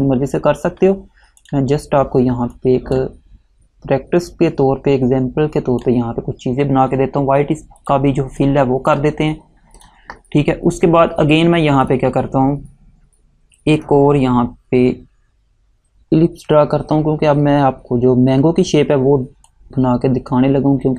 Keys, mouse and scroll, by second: 1.5 click, 19.6 click.